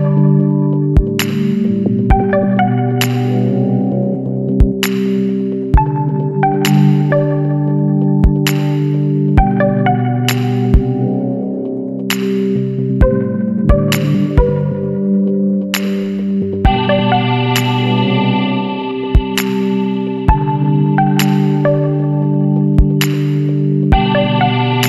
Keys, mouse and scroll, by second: 1.8 click, 6.0 click, 8.4 click, 10.0 click, 10.9 click, 11.4 space, 12.6 click, 13.2 click, 15.0 click, 16.3-17.9 middle drag, 16.5-17.9 drag, 19.1 click, 19.4 space, 20.4-22.0 middle drag, 20.6-22.0 drag, 22.2 scroll down 1, 22.8-24.8 middle drag, 23.0 click.